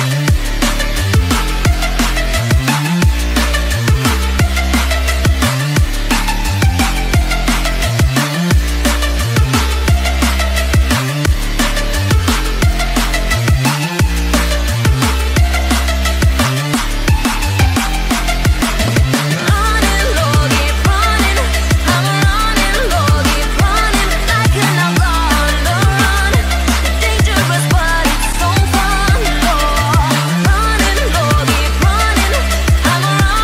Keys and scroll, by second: 16.1 ctrl+alt+z, 22.9 ctrl+alt+z, 31.6 ctrl+alt+z.